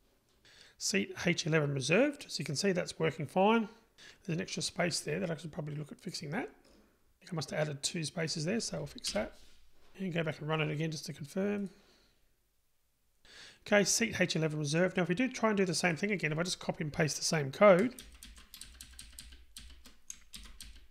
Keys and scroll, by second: 9.1 Delete, 12.0 super+r, 20.5 super+c.